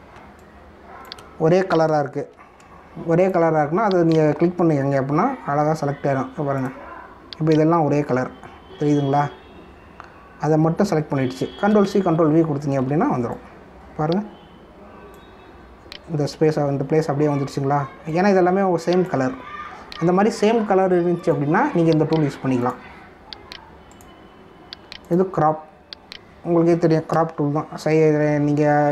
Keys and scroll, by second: 1.1 space, 3.3 ctrl+-, 12.7 ctrl+c, 12.9 ctrl+v, 13.8 v, 28.3 ctrl+-.